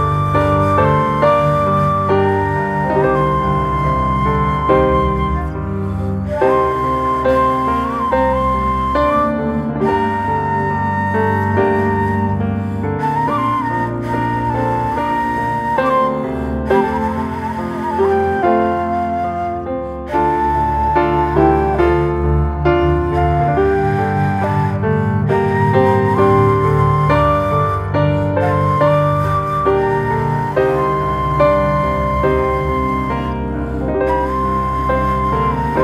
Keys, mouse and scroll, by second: 0.1 alt+middle click, 0.6 alt+middle click, 0.9 scroll up 1, 1.1 shift+middle click, 1.4 scroll up 1, 1.7 shift+middle click, 2.2 s, 4.0 middle click, 4.9 e, 6.7 middle click, 7.1 scroll down 4, 7.4 shift+middle click, 7.8 scroll down 1, 8.1 middle click, 8.5 Tab, 9.1 shift+a, 10.4 alt+middle click, 10.7-11.2 shift+middle drag, 11.2 s, 14.8 g, 16.5 scroll up 2, 17.1 shift+middle click, 18.0 s, 24.1 alt+middle click, 24.8 s, 27.9 scroll up 3, 28.3 shift+middle drag, 28.5 scroll up 1, 29.0 g, 30.3-30.9 middle drag, 30.9-31.2 scroll down 2, 31.8 scroll down 2, 31.8 Tab, 32.1 click, 32.7 s, 34.1 middle click, 34.8 Tab, 35.5 g.